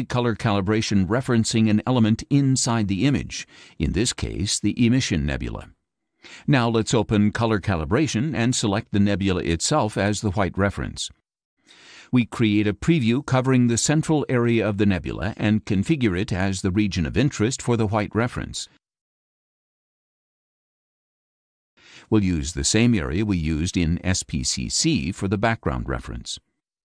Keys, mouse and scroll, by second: 4.4 click, 6.8 click, 9.8 click, 10.6 click, 13.2-15.3 drag, 17.3-20.1 ctrl+drag, 22.6-25.4 ctrl+drag.